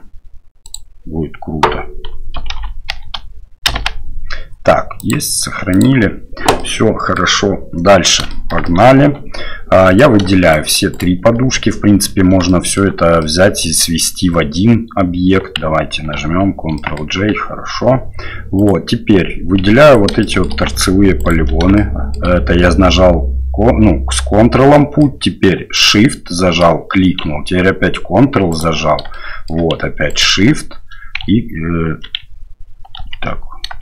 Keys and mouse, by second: 6.6-7.2 middle drag, 8.3 shift+middle drag, 8.6 middle click, 9.0 Tab, 9.9 right click, 10.5 shift+right click, 10.9 shift+right click, 12.5-12.8 shift+middle drag, 13.2 middle click, 16.2 ctrl+j, 16.8 middle click, 17.7 Tab, 18.6 right click, 19.6 3, 19.8 right click, 20.2 shift+middle click, 21.2 ctrl+right click, 21.8 shift+click, 24.9 click, 25.8 shift+right click, 28.5 ctrl+right click, 29.2 shift+middle click, 30.1 ctrl+right click, 33.0 ctrl+z.